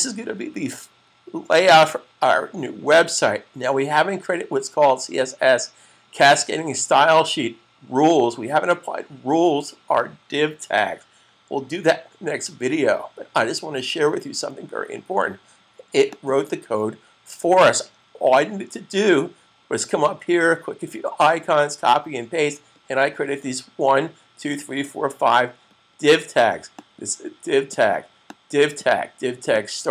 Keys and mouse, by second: 15.9 click, 26.6 click.